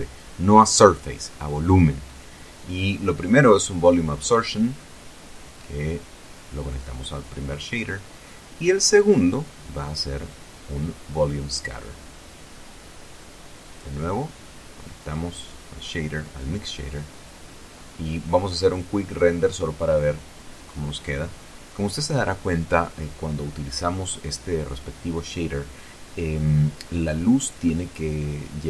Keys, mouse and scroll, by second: 1.3 shift+a, 3.7 click, 4.9 click, 6.2-7.5 drag, 9.5 shift+a, 12.6 click, 14.0 click, 15.8 click, 18.2-18.7 scroll down 4, 19.0 scroll up 2, 20.3 F12, 23.7 scroll down 2, 24.6 scroll down 1, 25.2-25.8 scroll up 3.